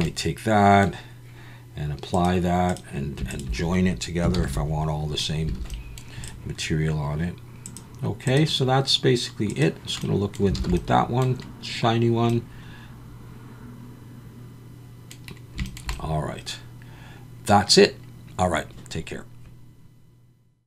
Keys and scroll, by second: 4.3 ctrl+j, 5.6 alt+a, 10.6 alt+a.